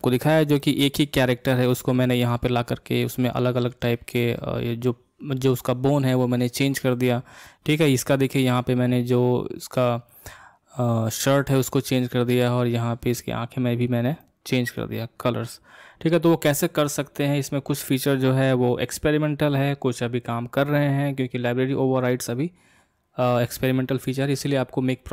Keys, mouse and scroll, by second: 0.6-3.7 middle drag, 6.6-9.7 middle drag, 11.5-17.2 middle drag.